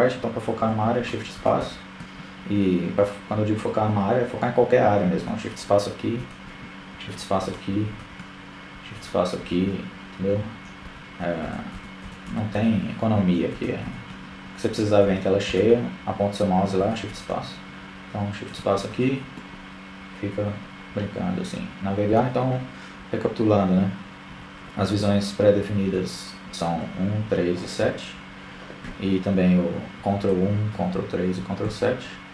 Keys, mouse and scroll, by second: 4.2 shift+space, 6.0 shift+space, 7.6 shift+space, 9.7 shift+space, 10.3 shift+space, 10.8 shift+space, 12.1 shift+space, 13.5 shift+space, 13.7 shift+space, 15.3 shift+space, 17.1 shift+space, 17.8-19.2 middle drag, 23.0-26.0 typing, 29.2 ctrl+KP_1, 30.1 ctrl+KP_3, 30.8 ctrl+KP_7.